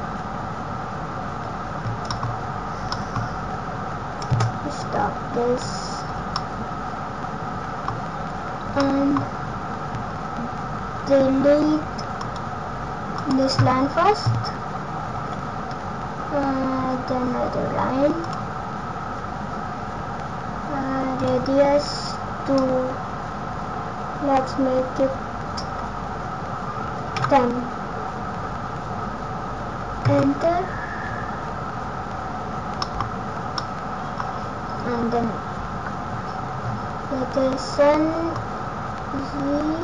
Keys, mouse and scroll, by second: 2.2-3.1 scroll down 4, 2.9 middle click, 3.1-3.5 scroll up 3, 4.9 click, 6.0-6.4 scroll down 2, 6.3 middle click, 8.7 middle click, 33.6 middle click, 38.2 click.